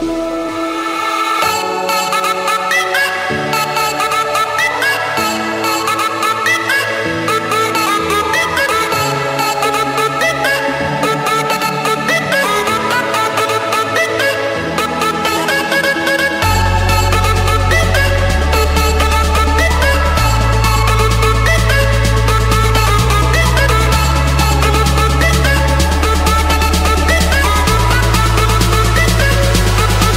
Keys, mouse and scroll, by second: 1.8 click, 2.0 Escape, 3.0 click, 4.9 click, 5.9 Escape, 6.0 Escape, 6.2 Escape, 6.4-8.5 typing, 8.7 Escape, 9.8 typing, 10.8-12.0 drag, 12.5 click, 13.3 click, 14.0 click, 14.4 middle click, 14.5 middle click, 14.9 Escape, 16.0 c, 16.8 Return, 19.3-20.5 drag, 20.8-22.5 typing, 22.7 Return, 24.6-25.8 middle drag, 26.0-27.8 typing, 28.4 Return, 29.6 click.